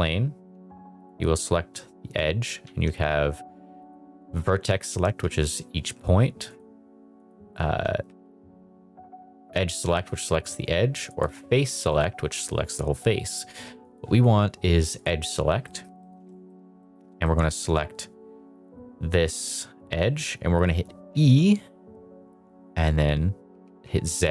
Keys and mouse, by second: 0.7 Tab, 1.0 click, 2.6 1, 3.8 click, 4.7 click, 5.2 g, 5.8 Escape, 6.4 click, 7.2 click, 7.9 g, 9.3 Escape, 11.0 click, 11.2 click, 11.8 click, 13.8 click, 14.9 click, 15.6 middle click, 16.0 middle click, 16.5 shift+middle click, 16.7 middle click, 17.2 shift+middle click, 21.0 e, 23.6 z.